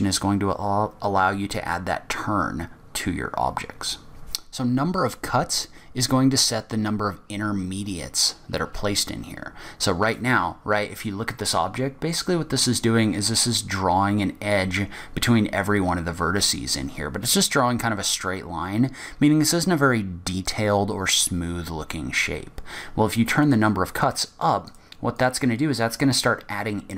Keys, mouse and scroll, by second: 4.1 ctrl+e, 10.3 middle click, 22.3-22.6 scroll down 1, 22.6-22.9 scroll up 1, 23.6 click, 24.2 click, 25.3 click, 25.5 click, 26.4 click.